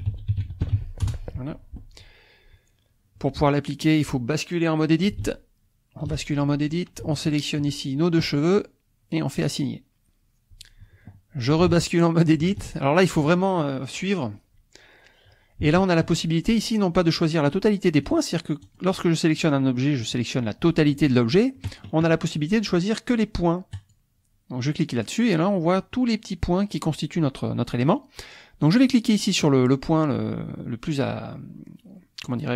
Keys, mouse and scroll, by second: 0.0-0.8 typing, 1.1 Return, 5.3 ctrl+Tab, 7.2 shift+click, 9.4 click, 11.7 ctrl+Tab, 14.8 scroll up 2, 15.7 shift+middle click, 18.0 click, 18.8 click, 19.5 click, 20.2 click, 23.8 click, 27.9 click, 28.9 click.